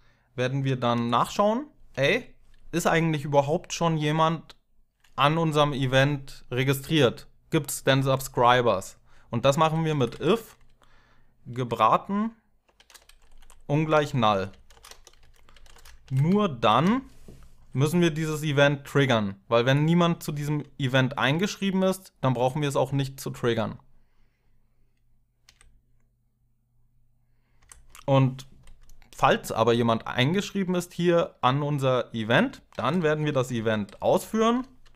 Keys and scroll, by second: 0.7 Tab, 9.0-9.9 typing, 9.9 Tab, 12.3-16.3 typing, 19.8 Tab, 20.0 Tab, 25.2 Tab, 27.4 Tab, 32.3-34.9 typing.